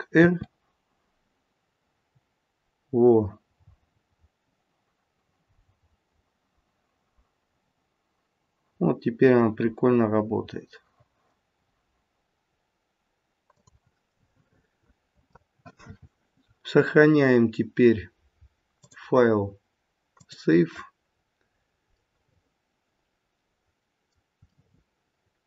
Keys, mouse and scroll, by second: 0.2 r, 14.1 middle click, 18.7 click, 21.1-21.8 scroll down 2, 21.5 scroll up 2, 24.5 middle click.